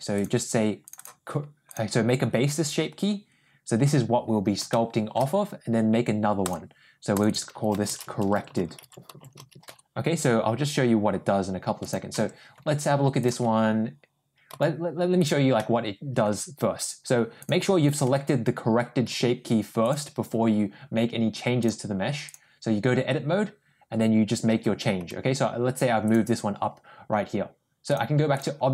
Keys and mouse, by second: 0.0 click, 0.7 click, 0.9 click, 4.6-5.0 shift+middle drag, 6.3 click, 7.0 click, 7.1-10.1 drag, 8.3 r, 11.7 click, 12.0 Tab, 14.3 g, 15.4 middle click, 17.9 Tab, 18.9 Tab, 19.7 click, 21.6 click, 24.9 g, 27.9 click.